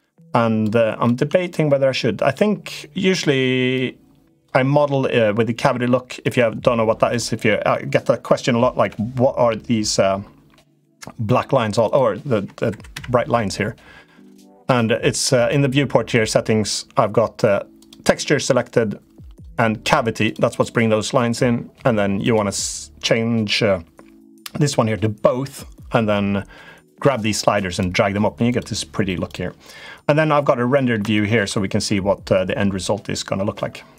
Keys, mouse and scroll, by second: 0.9 Tab, 3.6 click, 6.0 click, 8.5 KP_Decimal, 11.6 click, 12.7 KP_Decimal, 13.8 middle click, 15.2-20.6 drag, 22.0-27.8 drag, 30.3 middle click, 31.0 shift+middle click, 32.1 middle click.